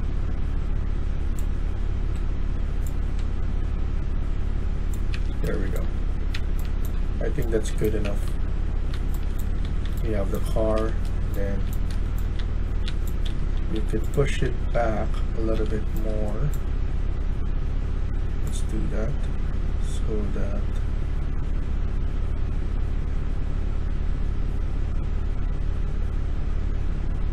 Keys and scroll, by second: 4.8-6.2 typing, 8.2-16.1 typing, 10.5 Escape, 10.6 Escape.